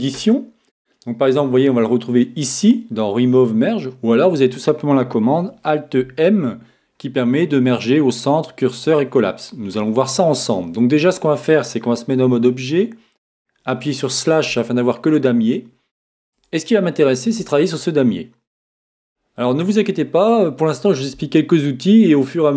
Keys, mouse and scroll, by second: 0.1 Tab, 6.3 alt+m, 12.2 Tab, 13.3 KP_Divide, 14.7-16.4 middle drag, 16.4 Tab, 17.2-19.2 middle drag.